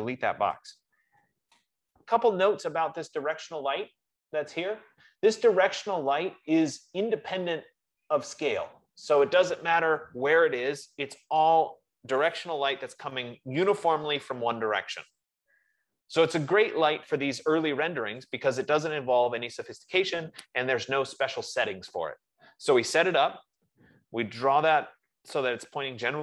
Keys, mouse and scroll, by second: 0.5-1.6 typing, 1.7 Return, 8.4 click, 25.6 F15.